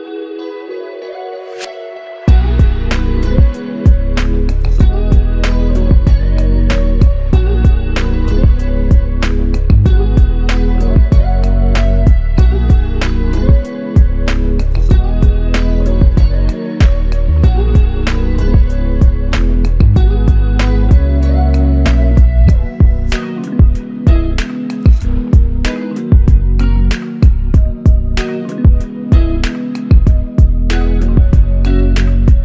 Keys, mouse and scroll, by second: 0.8 ctrl+click, 12.5 shift+click, 16.5 shift+click, 18.8 shift+click, 24.0 ctrl+click, 26.9 shift+click, 29.0 shift+click.